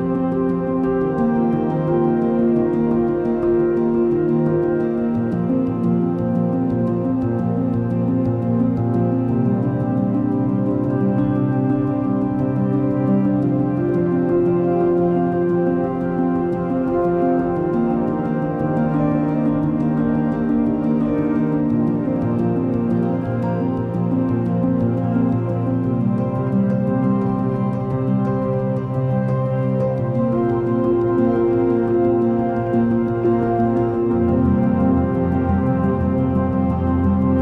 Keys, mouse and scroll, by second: 2.4-2.9 scroll down 2, 2.9-4.3 middle drag, 4.3 Tab, 5.3 s, 8.4-11.7 middle drag, 11.7 ctrl+r, 13.7 Tab, 16.1-19.2 drag, 19.2-19.8 middle drag, 19.8 Tab, 20.2-20.6 scroll up 2, 21.1 ctrl+r, 25.4 ctrl+r, 27.8 ctrl+r, 31.0 ctrl+r, 33.7-35.8 middle drag, 35.8 Tab, 36.6-37.4 middle drag.